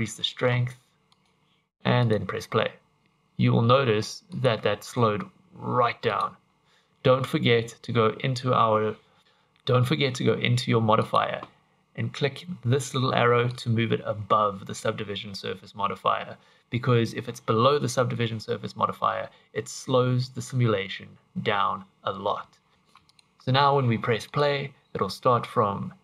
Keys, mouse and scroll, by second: 1.1 click, 1.3 click, 2.0 click, 3.0 Escape, 4.3 click, 6.1 click, 11.1 click, 13.5 click, 22.7 click, 22.7 scroll up 1, 22.8 Escape, 23.1 click, 24.3 click.